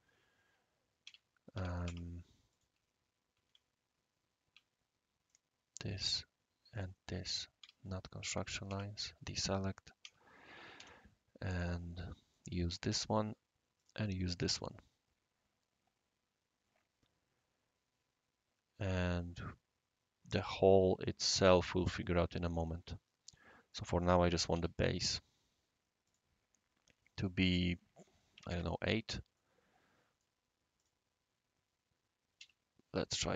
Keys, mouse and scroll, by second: 1.0 Escape, 1.5 Escape, 1.8 space, 2.5 click, 3.5 ctrl+z, 5.3 click, 5.7 click, 6.7 click, 7.6-12.2 typing, 8.4-9.0 drag, 11.7 click, 12.3 right click, 13.8 click, 14.4-18.9 right drag, 15.6-16.3 typing, 21.8-23.7 right drag, 24.5 typing, 26.0 click, 28.3 typing, 28.5 Tab, 29.3 right click, 30.1 click, 30.8 click, 32.4 End, 32.6 Down.